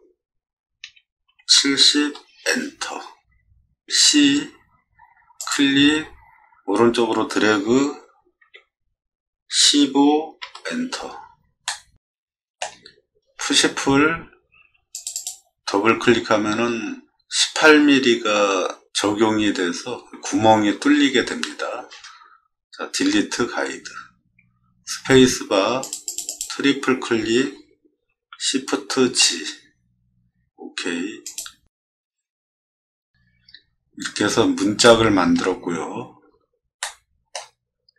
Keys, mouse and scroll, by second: 0.8 7, 1.2 0, 2.0 Return, 4.0 c, 5.4 click, 8.4 1, 9.5 5, 10.4 Return, 11.6 middle click, 13.5 p, 14.9 click, 15.1 click, 23.5 d, 24.8 space, 25.8 click, 26.2 click, 28.9 shift+g, 31.2 click, 32.9 middle click, 33.5 middle click, 33.5 scroll up 2, 34.2 middle click, 34.2 scroll down 2, 34.8 shift+middle click, 36.8-37.3 shift+middle drag.